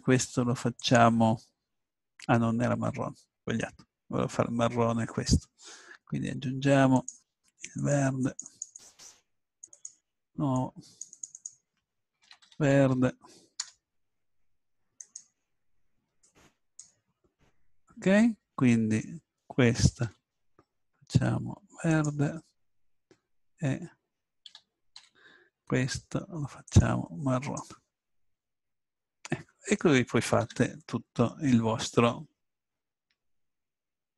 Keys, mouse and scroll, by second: 2.1 click, 6.9-16.6 drag, 20.0 l, 21.9-23.6 drag, 24.5 a, 25.0 l, 26.7-29.4 drag, 30.3 middle click, 30.4 Tab.